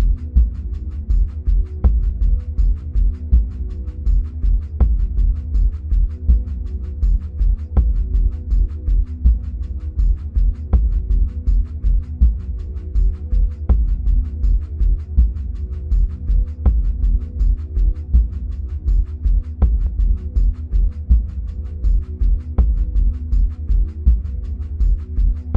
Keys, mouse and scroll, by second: 3.2-11.1 middle drag, 5.6-7.2 scroll down 2, 7.2 scroll down 1, 10.0-11.1 scroll up 2, 11.1-16.9 drag, 22.8 click.